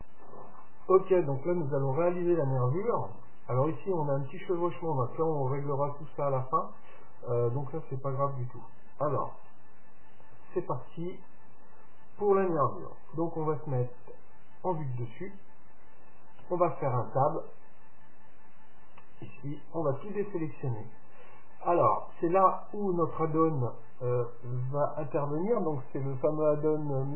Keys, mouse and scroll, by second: 13.1 KP_7, 16.4 Tab, 18.5-20.4 middle drag, 19.8 a.